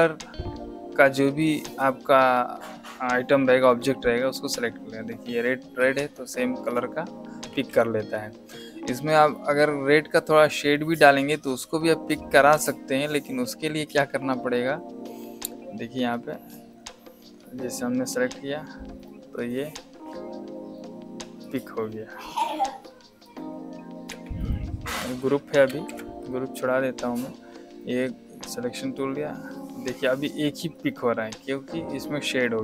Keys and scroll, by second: 7.4 shift+a, 24.0 v, 25.6 shift+g.